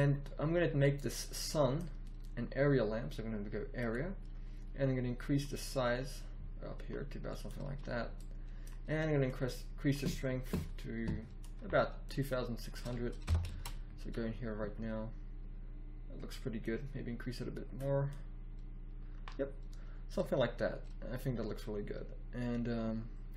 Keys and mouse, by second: 3.7-7.4 middle drag, 8.1-11.0 middle drag, 12.0-12.7 middle drag, 13.2 KP_0, 13.6 shift+z.